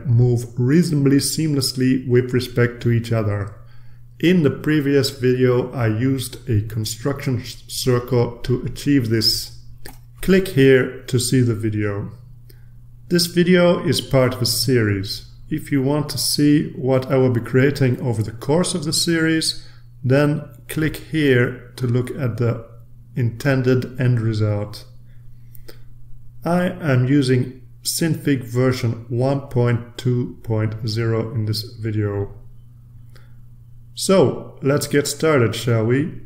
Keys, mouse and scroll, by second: 1.6 ctrl+z, 2.0 ctrl+z, 2.9 ctrl+click, 3.9 click, 5.0-9.0 drag, 10.1 ctrl+z, 29.8 click, 31.0-31.7 drag, 35.8 click.